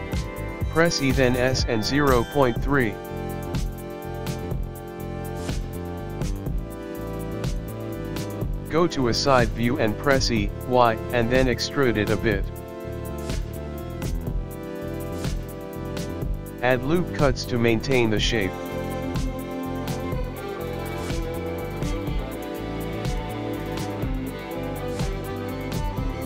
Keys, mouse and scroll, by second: 1.6 e, 8.4 middle click, 11.1-12.9 scroll down 3, 12.9 e, 15.5 middle click, 16.1 click, 16.1 middle click, 16.1 scroll up 2, 16.1 f, 16.6 scroll down 1, 16.6 middle click, 18.1 scroll up 3, 19.2 middle click, 21.4 ctrl+r, 22.8 ctrl+r, 25.6 middle click.